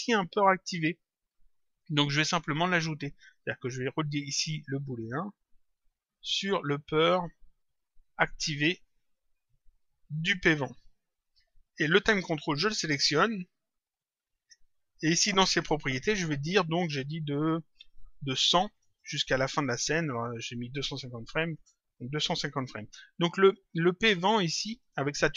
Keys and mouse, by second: 3.2 click, 5.2 click, 8.8 click, 11.2 click, 12.4 click, 14.4 click, 17.8 click, 19.4 click, 21.8 click, 23.4 click, 24.7 click.